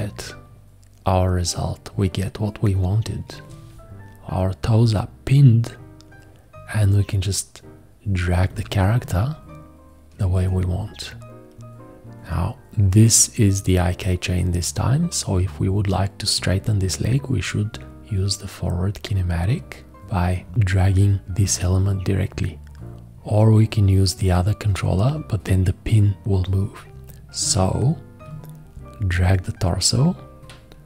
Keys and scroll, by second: 27.5 ctrl+z.